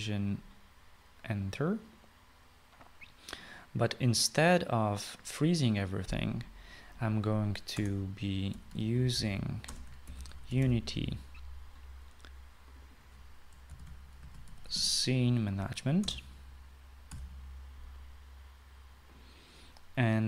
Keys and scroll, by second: 0.0-1.3 typing, 8.8 Return, 9.3-12.2 typing, 14.5-16.2 typing, 17.1 Return, 18.2 ;.